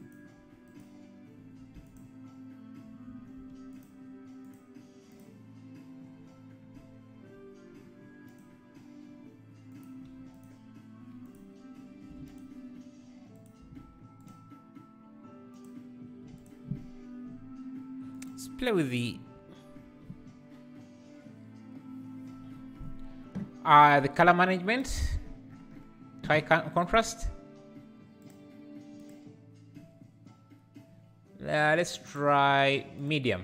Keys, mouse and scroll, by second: 0.7 click, 2.0 x, 3.9 click, 4.4 click, 5.1 click, 8.5 click, 10.4 click, 12.3 click, 14.2 KP_0, 16.4 click, 29.6-33.4 drag.